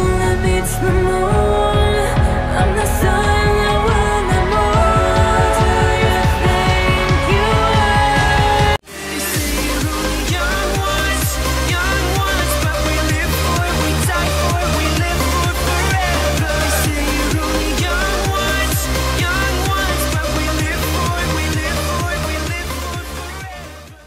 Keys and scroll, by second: 3.4 shift+Page_Down, 8.6 F10.